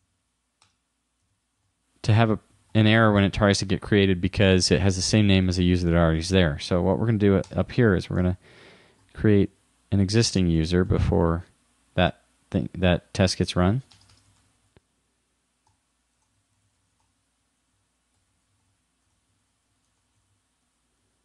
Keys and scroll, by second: 1.6 shift+-, 8.3 shift+2, 10.7 shift+-, 14.4 shift+u, 16.8 shift+9, 17.1 shift+2, 19.1 shift+-, 21.0 super+s.